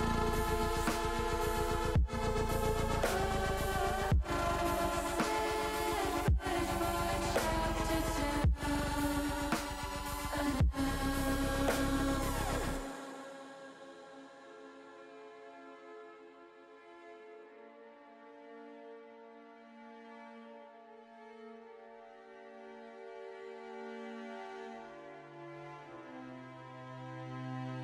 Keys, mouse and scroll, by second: 2.1 click, 3.4 Tab, 6.4-8.9 drag, 10.4 Tab, 11.4 ctrl+r, 13.5 click, 17.4 click, 18.3-19.5 drag, 20.4 ctrl+r, 21.9 click, 24.0 Tab, 24.3 click, 25.5 ctrl+r.